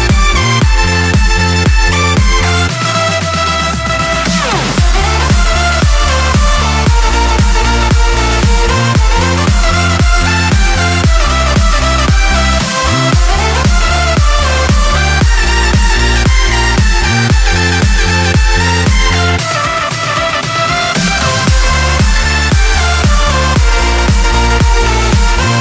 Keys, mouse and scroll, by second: 0.6-1.9 drag, 2.2-2.9 drag, 3.3-4.5 drag, 4.9-6.7 drag, 7.3-8.9 drag, 10.2-10.9 drag, 13.5 click, 15.2-16.7 typing, 17.6 click, 18.3 click, 19.2 click, 21.9 click, 23.6 click, 24.7 click.